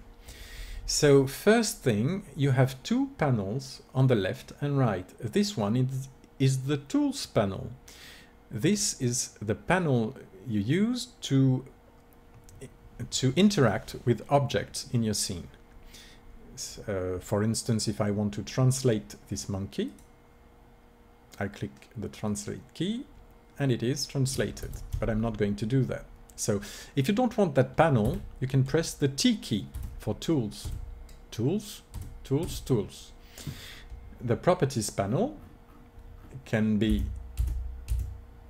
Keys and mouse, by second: 19.8-21.6 drag, 21.6 middle click, 24.5 ctrl+z, 28.0 t, 29.6 t, 30.6 t, 31.8 t, 32.3 t, 36.8 n, 37.2 n, 37.7 n.